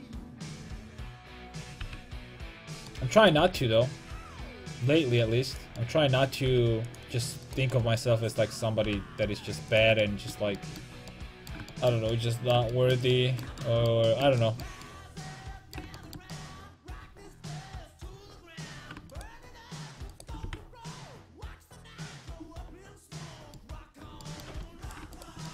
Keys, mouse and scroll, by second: 1.8 g, 2.9 click, 3.4 g, 5.6-7.5 drag, 6.5 g, 8.9 g, 13.9-15.1 middle drag, 18.7-22.0 right drag, 20.5 g, 24.7 a, 24.9-25.5 right drag.